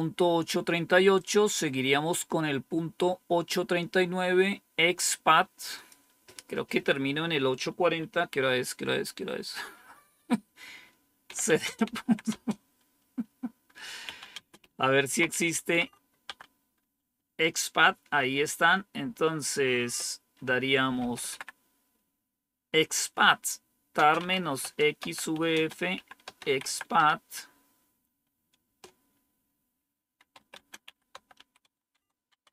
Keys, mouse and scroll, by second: 1.0 click, 5.6 click, 10.9-12.4 typing, 13.7-15.4 typing, 15.6 Tab, 16.1 Tab, 18.6-21.7 typing, 23.8-27.0 typing, 28.5 Return, 29.8-31.7 typing, 31.8 Tab, 32.2 Tab.